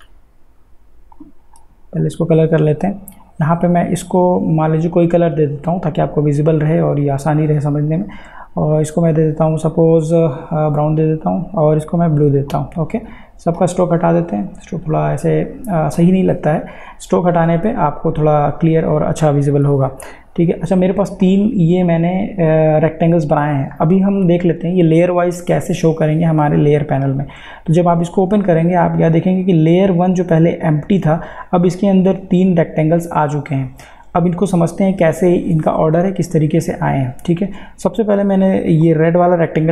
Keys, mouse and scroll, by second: 0.0 ctrl+z, 1.2 click, 6.7 click, 10.0 click, 19.8 click, 29.2 click, 38.8 click.